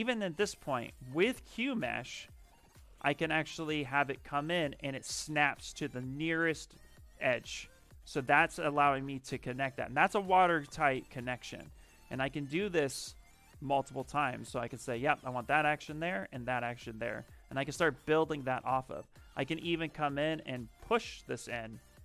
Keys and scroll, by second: 1.3 space.